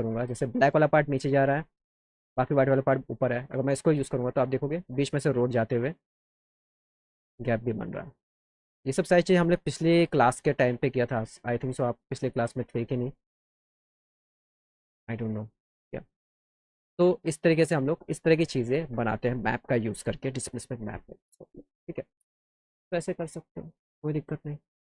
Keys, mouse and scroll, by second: 3.6 click, 4.7 alt+middle click, 5.2 alt+middle click, 9.4-11.0 drag, 12.1 click, 24.5 click.